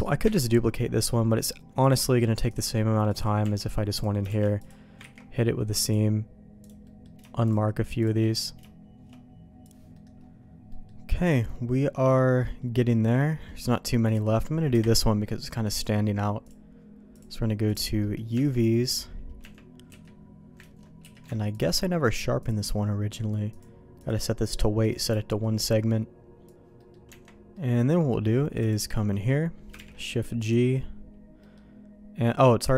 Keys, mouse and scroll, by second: 0.2 KP_Divide, 1.8 click, 2.6 click, 3.4 Tab, 3.9 click, 4.3 shift+g, 5.2 ctrl+e, 6.6 click, 6.8 middle click, 7.4 shift+click, 8.2 middle click, 9.9 middle click, 10.7 middle click, 11.1 middle click, 11.7 middle click, 13.4 middle click, 14.0 click, 14.7 KP_Divide, 15.8 click, 17.2 click, 18.0 middle click, 18.3 Tab, 19.4 Tab, 19.9 q, 21.0 q, 22.4 click, 23.6 click, 24.8 click, 26.8 middle click, 27.1 Tab, 27.5 middle click, 28.6 click, 29.1 middle click, 29.7 shift+g, 31.4 middle click.